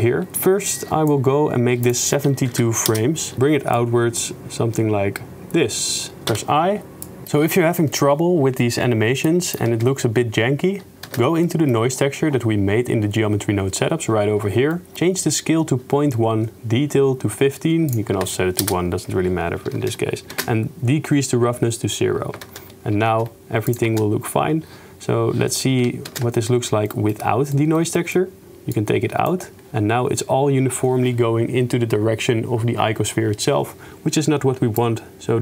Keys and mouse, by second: 1.9-3.0 drag, 3.3 shift+space, 3.5-6.2 shift+middle drag, 6.3 i, 7.1 middle click, 7.3 shift+space, 9.3-9.6 drag, 9.7 shift+space, 11.2 shift+space, 11.6 click, 18.1-19.7 drag, 19.8 shift+space, 20.4 shift+space, 22.6 shift+space, 23.2 shift+space, 23.7 click, 23.9 shift+space, 26.2 shift+space, 26.9 click, 27.6 click, 28.1 click, 28.8 click, 29.1-29.4 drag, 34.8 click, 35.1 click.